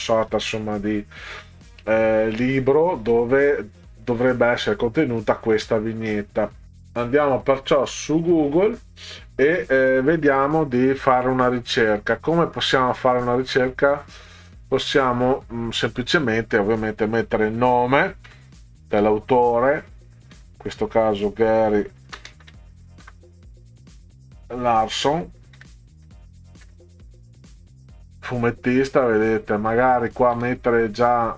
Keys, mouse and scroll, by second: 9.8-14.7 drag, 16.1 click, 18.3 g, 19.0 a, 20.4 r, 22.0-23.9 typing, 25.6 s, 26.1 o, 26.7 n, 30.0 click, 30.4 space.